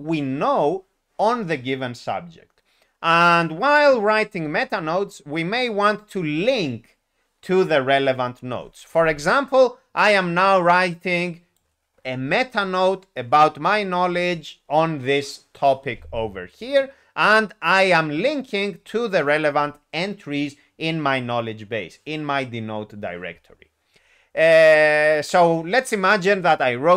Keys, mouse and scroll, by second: 11.5 click, 25.0 click.